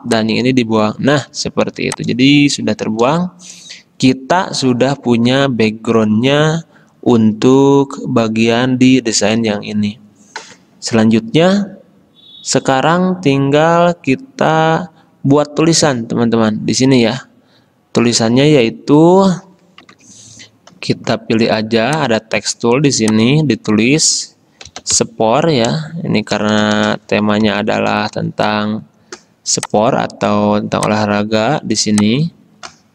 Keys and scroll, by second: 1.8 v, 19.9 F10, 24.6-25.8 typing, 27.0 Caps_Lock, 27.4-28.7 typing.